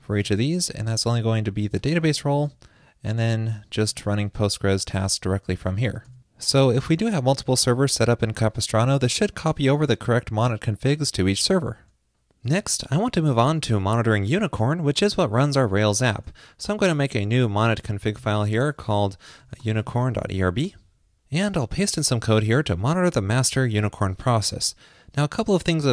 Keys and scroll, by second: 0.2 super+v, 1.5 super+v, 4.1 super+v, 18.3 super+a, 22.7 super+v.